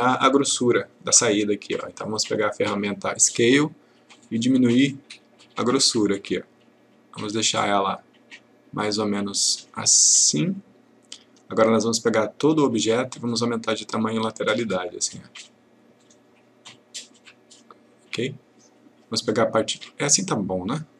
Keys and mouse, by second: 2.0 click, 4.2-11.3 click.